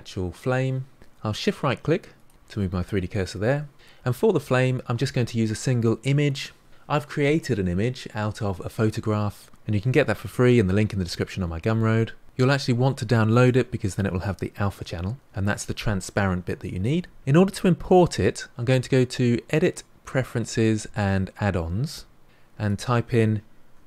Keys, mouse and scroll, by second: 2.1 shift+right click, 20.7-23.7 drag.